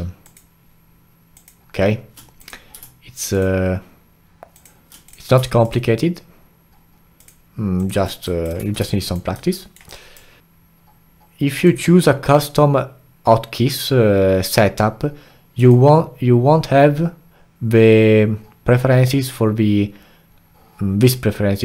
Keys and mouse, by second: 0.2 alt+shift+click, 1.3 alt+shift+click, 2.4 click, 3.3 alt+shift+click, 4.5 alt+shift+click, 5.0 click, 5.6 alt+shift+click, 7.2 alt+shift+click, 7.8 alt+shift+click, 8.2 alt+right click, 8.6 a, 8.9 alt+click, 9.6 alt+middle click, 9.9 alt+click.